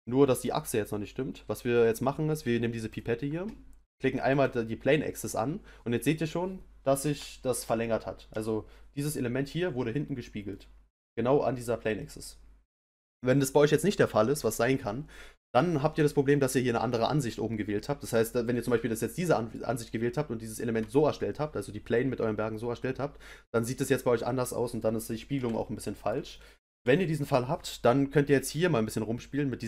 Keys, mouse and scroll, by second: 2.9 click, 6.1-15.0 middle drag, 18.2-21.2 middle drag, 24.0-29.6 middle drag.